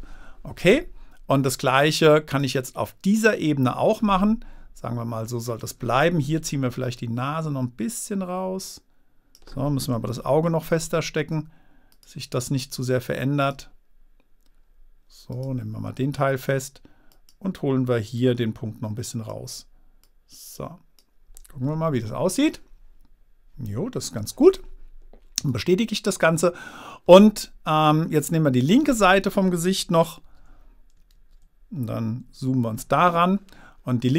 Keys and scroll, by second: 10.5 super+z, 22.1 super+-.